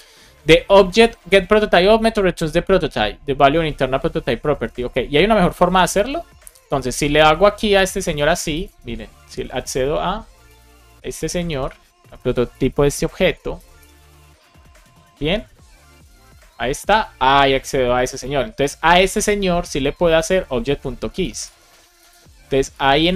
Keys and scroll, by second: 8.1 super+c, 10.7 super+v, 11.5 shift+0, 12.4 BackSpace, 12.7 shift+9, 13.1 super+Right, 13.5 BackSpace, 15.3 shift+o, 18.5 shift+super+Left, 18.8 super+x, 21.3 super+v, 22.6 super+Left, 22.9 Right.